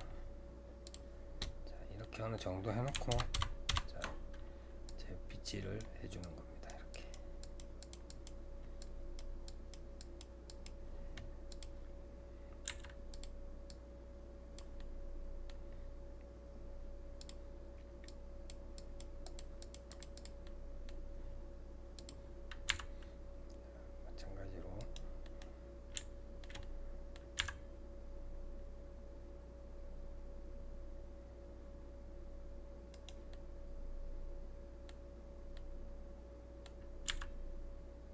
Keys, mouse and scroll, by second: 0.9-2.0 drag, 2.0-3.1 middle drag, 3.1 ctrl+KP_Add, 3.3 ctrl+KP_Add, 4.9-12.7 drag, 12.7 f, 13.7-14.8 drag, 14.8-17.2 middle drag, 17.2-20.5 drag, 20.5-22.0 middle drag, 22.0-25.3 drag, 25.3 middle click, 25.5-26.0 scroll down 2, 26.0-27.4 shift+middle drag, 33.3-35.2 middle drag, 35.2-35.6 scroll up 3, 35.6-37.1 middle drag, 37.1 g.